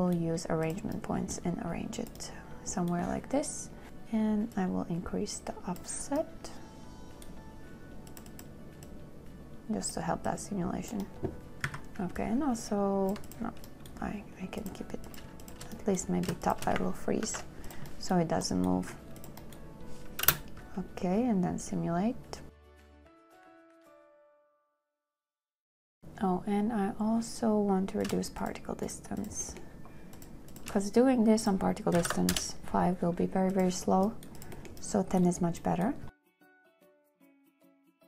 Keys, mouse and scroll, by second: 12.0 a, 15.7 shift+click, 16.7 shift+click, 17.5 ctrl+k, 20.5 space, 25.1 space, 25.3 shift+click, 25.5 ctrl+k, 28.5 shift+click, 28.7 shift+click, 28.8 shift+click, 29.1 shift+click, 29.5 click, 29.7-30.4 scroll, 30.4 click, 30.8 click, 31.4 shift+scroll, 32.3 scroll, 32.3 KP_1, 32.5 KP_0, 32.6 Return, 36.1 Return, 36.1 click, 36.2 space.